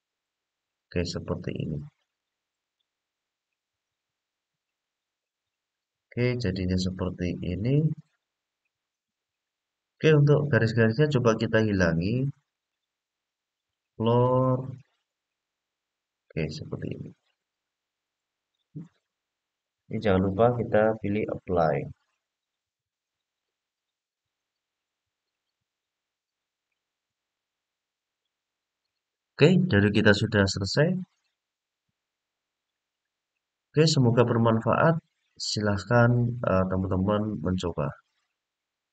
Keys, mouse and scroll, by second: 1.8-2.6 drag, 3.7-4.5 scroll down 2, 4.5-9.0 middle drag, 9.5-10.0 middle drag, 12.3-16.6 drag, 18.1 click, 20.0-21.2 drag, 22.5-23.1 scroll down 1, 23.1-23.9 middle drag, 23.1-23.5 scroll down 1, 24.3-25.3 scroll up 2, 25.3-26.4 middle drag, 27.1-30.0 middle drag, 30.7-32.3 middle drag, 32.8-33.7 middle drag, 34.4-37.8 middle drag.